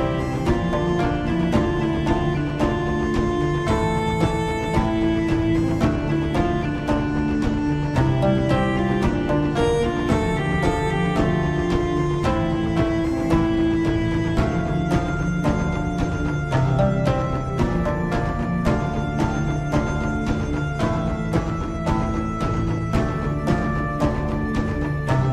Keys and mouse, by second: 8.5-9.5 middle drag, 10.2 KP_7, 11.4-12.5 middle drag, 12.9 middle click, 14.6 KP_7, 17.5 z, 19.1 z, 23.8-25.0 drag.